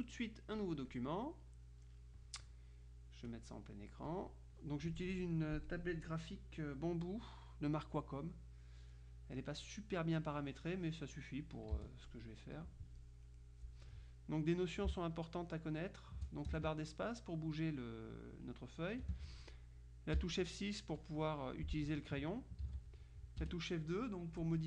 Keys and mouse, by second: 0.7-1.7 drag, 4.4 click, 11.9 z, 12.1-13.2 drag, 15.0 space, 17.1 space, 20.3 F6, 21.1-22.1 drag, 22.7 ctrl+z, 23.5 F2.